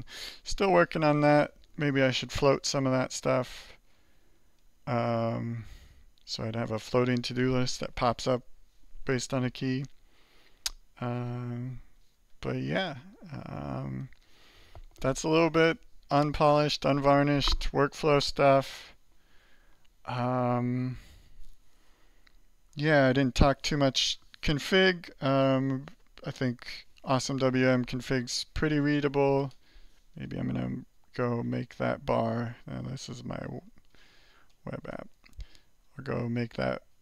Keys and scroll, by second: 2.3 alt+4, 3.1 alt+3, 3.7 alt+2, 4.3 alt+1, 4.7 alt+2, 5.0 alt+3, 5.6 alt+4, 8.9 alt+8, 10.0 alt+9, 10.7 alt+8, 11.7 alt+5, 12.2 alt+6, 12.7 alt+5, 13.1 alt+3, 13.8 alt+4, 32.4 alt+2, 33.4 alt+3, 34.3-37.0 typing.